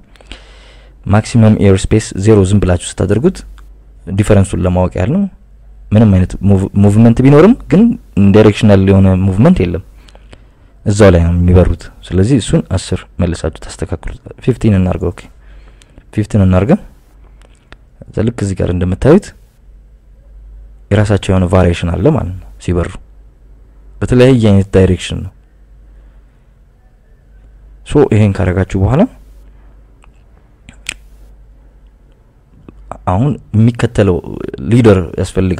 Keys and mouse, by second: 1.5 click, 3.2-5.0 drag, 6.0-6.5 drag, 7.1 click, 13.3 click, 14.3 click, 15.9-17.7 drag, 18.8 click, 29.5 drag, 30.5 click, 31.9 KP_Subtract, 32.1 KP_Subtract, 32.4 KP_Subtract, 32.6 KP_Subtract, 34.0 KP_Subtract.